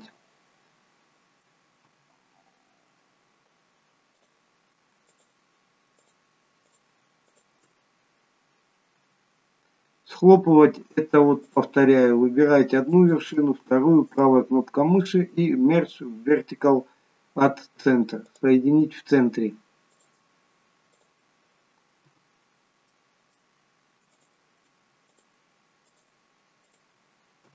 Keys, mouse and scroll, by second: 1.9 f, 4.2 click, 5.1 shift+click, 7.2 shift+click, 9.1 shift+click, 9.1 f, 11.5 click, 12.9 shift+click, 14.2 right click, 20.1 shift+click, 22.0 shift+click, 22.0 f, 22.9 middle click, 24.2 click, 25.1 shift+click, 26.0 click, 27.3 shift+click.